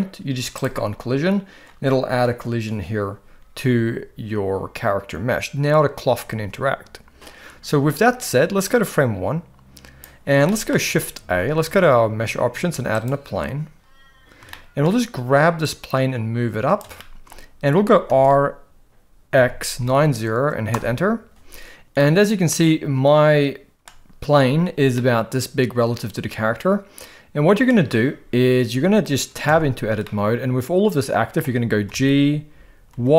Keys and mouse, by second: 0.5 click, 8.7 click, 10.4 shift+middle click, 11.2 shift+a, 14.5-14.8 shift+middle drag, 15.6-16.8 drag, 17.0 shift+middle drag, 18.1 r, 21.8 r, 22.0-23.9 middle drag, 24.9-27.7 middle drag, 29.4 Tab, 30.0-31.4 middle drag, 31.8 g.